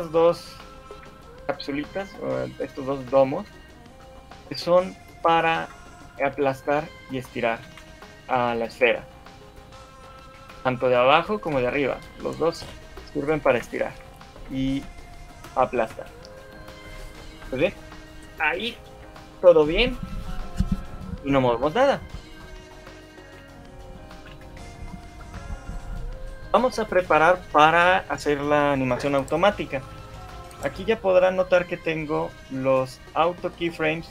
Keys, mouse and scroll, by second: 0.3 shift+click, 1.1 KP_3, 1.9 scroll up 3, 2.3 KP_1, 3.3 shift+middle click, 4.5 click, 6.3 click, 8.1-8.5 scroll down 3, 8.5 shift+middle click, 9.3 click, 11.1 click, 11.3 click, 14.3 shift+middle click, 16.1 click, 16.7 shift+middle click, 22.5 middle click, 23.3 shift+middle click, 24.3 scroll down 2, 24.5 shift+middle click, 24.9 scroll up 1, 25.3 shift+middle click.